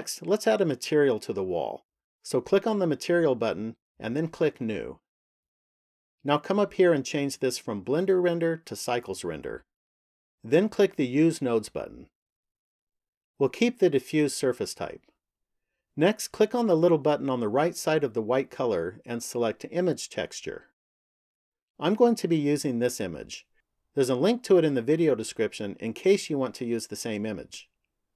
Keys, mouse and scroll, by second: 3.3 click, 5.1 click, 7.8 click, 13.0 click, 18.4 click.